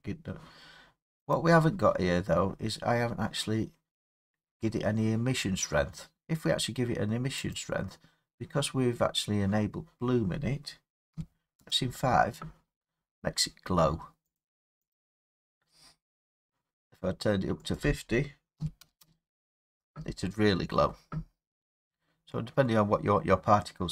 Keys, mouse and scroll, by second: 1.4 click, 2.5-3.4 scroll, 7.6 click, 11.1 5, 11.6 Return, 14.4 click, 14.9 click, 16.0 middle click, 16.1 middle click, 17.8 click, 18.6 typing, 19.0 Return, 22.8 typing.